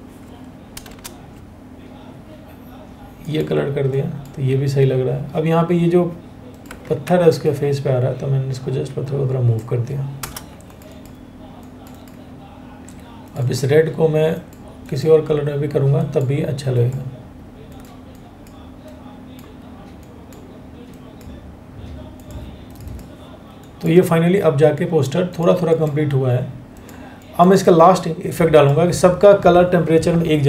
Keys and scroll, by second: 0.4 ctrl+BackSpace, 6.6 ctrl+t, 9.8 Return, 12.7 Return.